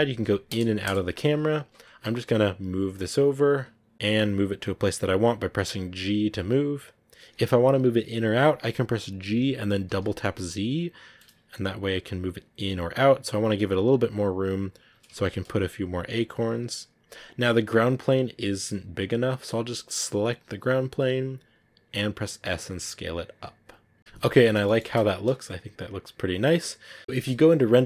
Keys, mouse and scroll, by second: 0.4 KP_0, 0.7 KP_0, 1.4 scroll up 3, 1.8-2.4 scroll down 4, 2.4 g, 3.9 g, 4.3 g, 5.5 g, 9.2 g, 14.2 g, 14.8 g, 15.8 g, 20.2 right click, 20.7 scroll down 1, 21.3 s, 24.0 a, 24.5-27.0 shift+middle drag, 27.0 a, 27.8 scroll up 2.